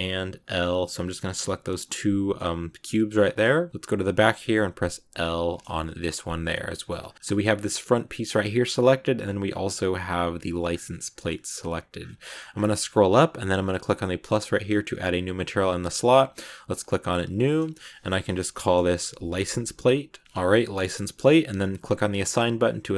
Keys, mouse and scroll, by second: 1.5 scroll down 2, 1.7-5.0 middle drag, 5.0 l, 5.9 middle click, 6.8-7.3 scroll up 3, 10.6 scroll down 1, 10.8-11.8 middle drag, 11.8-12.5 scroll up 19, 12.6 scroll down 1, 12.7-14.2 scroll up 4, 14.2-20.2 drag, 22.0 click, 22.3 middle click.